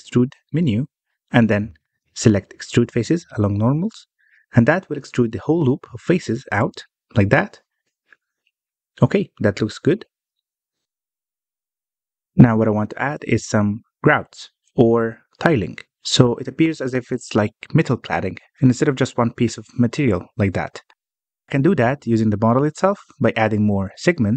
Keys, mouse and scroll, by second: 10.5-13.5 middle drag, 13.5 click, 15.0 click, 15.3 Tab, 15.5-16.0 scroll up 1, 16.0-16.4 scroll down 1, 16.4-18.5 shift+middle drag, 18.5 alt+a, 18.9-21.0 middle drag, 21.0 scroll down 1, 21.0-23.1 shift+middle drag, 23.1 click, 23.5 Tab.